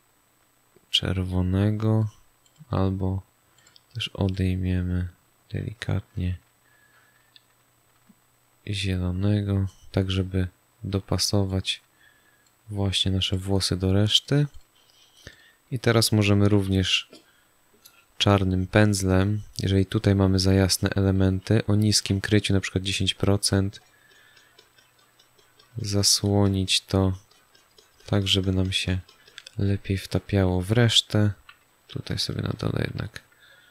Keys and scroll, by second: 16.5 b, 21.9 1, 31.3 x.